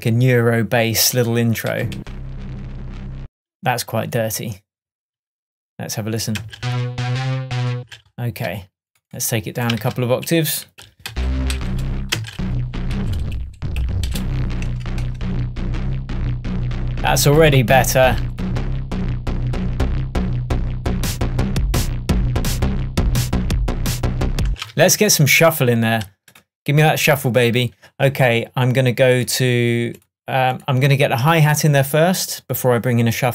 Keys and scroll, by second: 1.8 Down, 6.4 space, 7.8 space, 9.9 super+a, 15.1 shift+Tab, 24.5 space, 24.8 super+s.